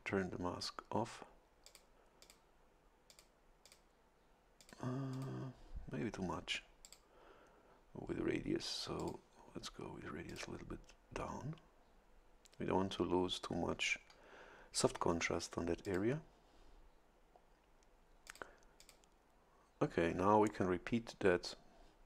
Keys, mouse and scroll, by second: 1.6 click, 2.2 click, 3.1 click, 3.6 click, 4.6 click, 5.1 click, 6.8 click, 9.0 click, 10.3 click, 15.8 click, 18.3 click, 18.8 click.